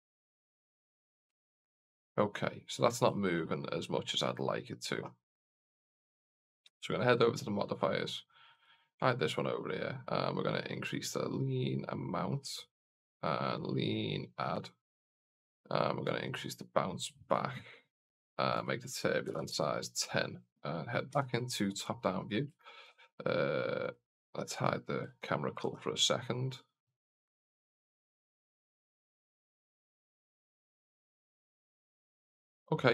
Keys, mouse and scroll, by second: 1.6 alt+a, 2.1 middle click, 3.0 shift+middle drag, 3.4-4.2 middle drag, 6.9 click, 8.5 click, 9.3 scroll down 1, 10.5 scroll down 1, 10.7-12.8 drag, 13.3-14.7 drag, 15.9-17.3 drag, 18.4-20.0 drag, 21.0 KP_7, 22.1 scroll down 1, 22.5 shift+middle drag, 23.8 click, 24.6-24.9 scroll down 1, 25.6 alt+a, 27.3-28.3 middle drag, 29.3 scroll up 1, 29.6 middle click, 30.8 scroll up 1.